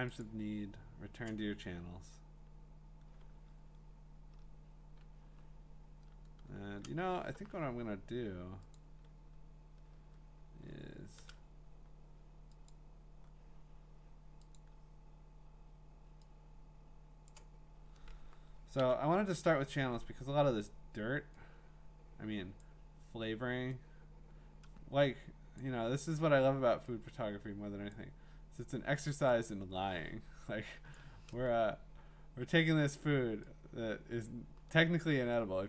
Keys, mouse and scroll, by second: 0.2 click, 7.1 click, 7.1 scroll, 7.3 middle click, 8.7 click, 10.7-11.6 alt+scroll, 12.7 click, 14.6 click, 17.3 click, 18.8 ctrl+i, 22.6 click, 23.2-27.7 drag, 30.9 click, 32.7 click, 34.2 click.